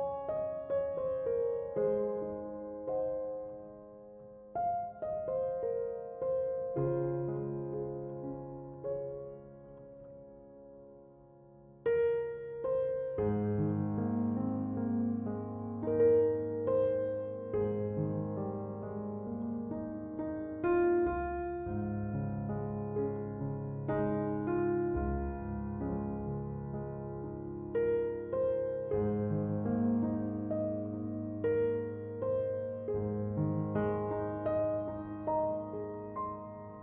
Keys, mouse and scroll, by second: 32.2-33.6 right drag.